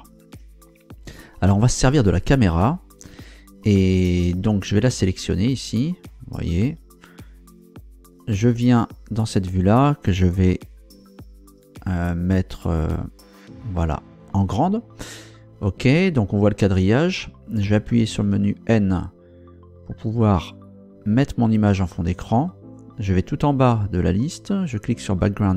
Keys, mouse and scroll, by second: 4.6 right click, 13.0 ctrl+Down, 18.0 n, 20.6-21.9 drag, 24.7 click.